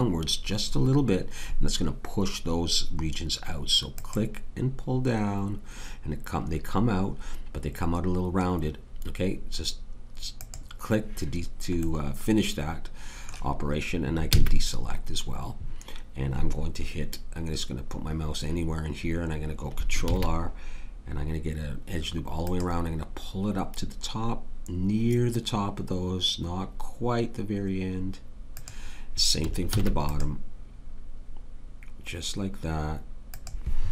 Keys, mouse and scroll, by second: 3.9-7.7 middle drag, 14.3 a, 20.0 ctrl+r, 29.7 ctrl+r.